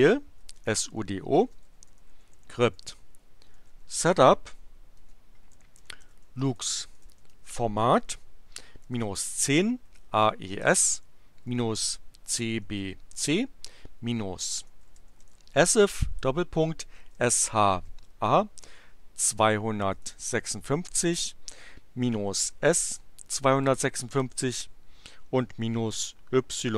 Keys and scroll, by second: 0.1-18.6 typing, 19.6-21.0 typing, 22.2-24.9 typing.